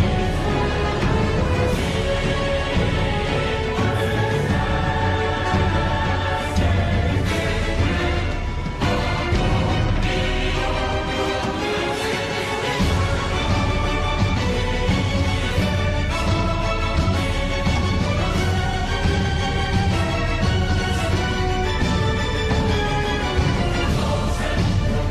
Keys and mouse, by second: 1.5 middle click, 2.9 middle click, 4.3 Tab, 4.8-7.5 middle drag, 7.8 Tab, 12.7 middle click, 13.4 3, 14.3 click, 15.4 KP_3, 17.3 e, 20.4 middle click, 21.6 middle click, 22.6 2, 23.4 click, 24.6 KP_3.